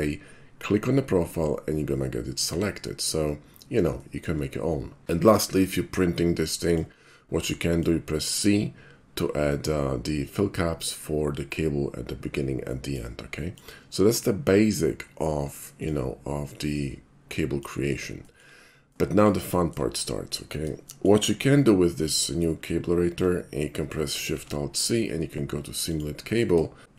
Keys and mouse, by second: 2.5 a, 4.0 shift+middle drag, 5.5 /, 6.6 middle click, 7.4-7.8 middle drag, 12.7 middle drag, 13.4 middle drag, 15.8 click, 16.7-17.6 middle drag, 18.3 shift+middle click, 18.6 shift+middle click, 18.9-19.3 shift+middle drag, 19.5 shift+middle drag, 20.9 shift+middle click, 24.1 alt+shift+c, 25.9 click, 26.8 alt+shift+c.